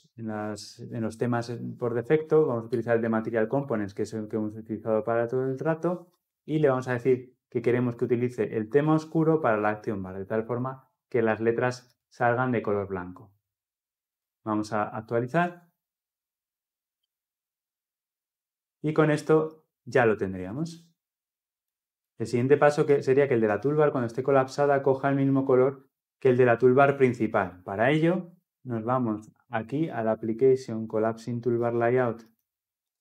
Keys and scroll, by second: 2.4 Return, 13.9 ctrl+F10.